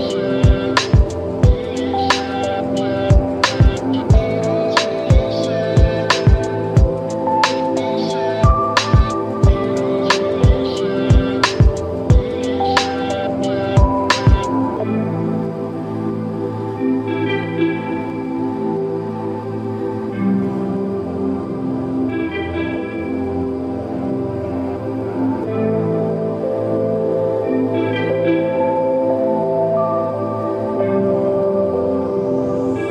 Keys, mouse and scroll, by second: 0.6-0.9 scroll down 1, 3.3 scroll down 1, 5.9-7.0 drag, 9.4-11.0 drag, 14.3 click, 15.6 click, 17.0 click, 20.3-23.5 drag, 25.8-29.7 drag, 30.7-32.9 drag.